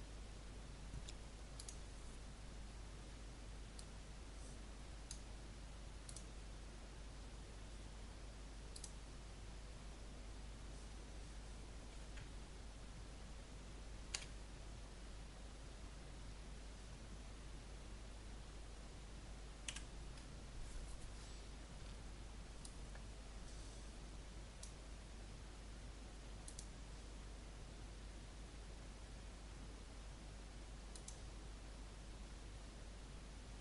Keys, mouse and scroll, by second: 14.1 F12, 19.6 Escape, 22.6-25.3 drag.